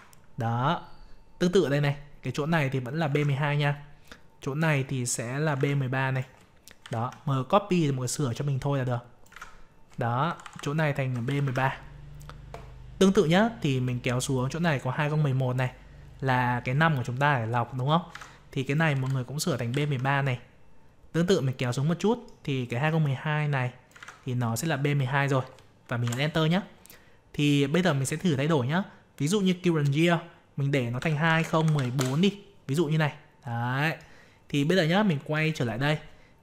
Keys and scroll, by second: 3.1 ctrl+v, 9.3 ctrl+v, 18.1 ctrl+v, 23.9 ctrl+v.